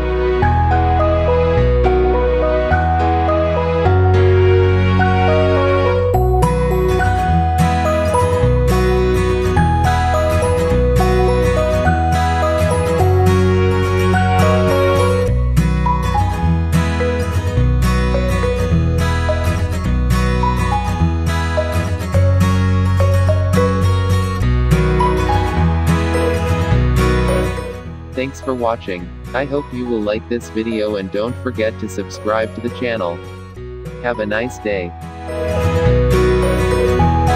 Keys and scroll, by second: 9.6 Left, 10.0-12.5 typing, 10.1 Right, 10.5 Right, 10.9 Right, 11.3 Right, 11.7 Right, 12.3 Right, 13.7 ctrl+z.